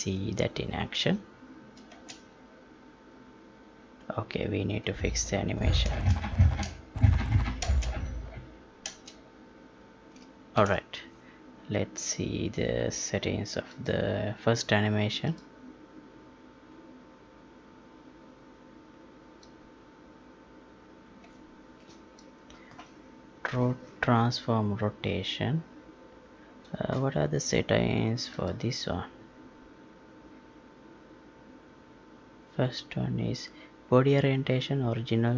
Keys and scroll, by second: 1.8 space, 7.6 space, 8.9 space, 10.5 ctrl+p.